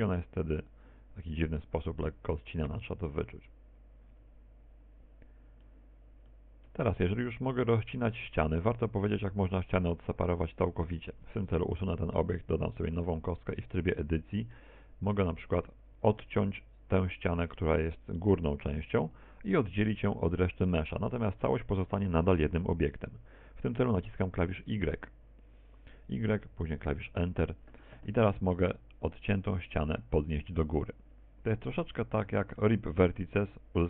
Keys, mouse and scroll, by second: 8.3 middle click, 9.1 shift+middle click, 9.9 middle click, 10.8 middle click, 12.6 scroll down 2, 13.1 Tab, 13.6 x, 14.1 shift+a, 15.4 Tab, 16.0 middle click, 17.3 right click, 18.3 shift+right click, 19.0 right click, 19.6 shift+right click, 23.4 middle click, 27.0 y, 28.7 Return, 31.5 click.